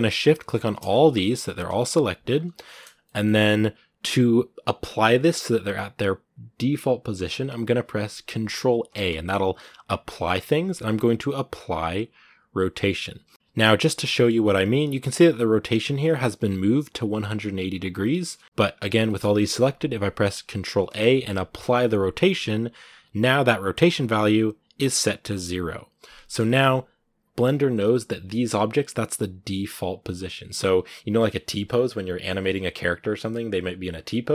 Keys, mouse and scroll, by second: 0.4 shift+right click, 0.5 scroll down 2, 0.9 g, 1.6 shift+middle click, 2.0 scroll up 2, 2.4 shift+middle click, 3.2 scroll up 2, 13.3 shift+right click, 13.9-18.4 shift+middle drag, 18.4-18.8 scroll down 3, 18.8-23.6 shift+middle drag, 23.6 ctrl+a, 25.8-26.2 scroll up 2, 26.2 shift+middle click, 26.8-28.4 scroll down 1, 28.4-33.4 scroll down 1, 33.4-34.3 scroll down 1.